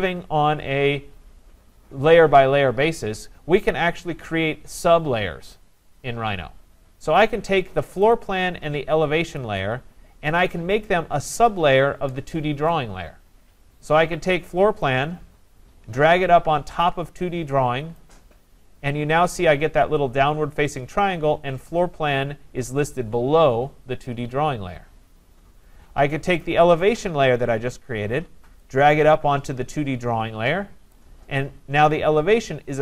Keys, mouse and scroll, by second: 8.1 click, 9.4 click, 10.4 click, 17.9 click, 26.4 click, 30.9 click.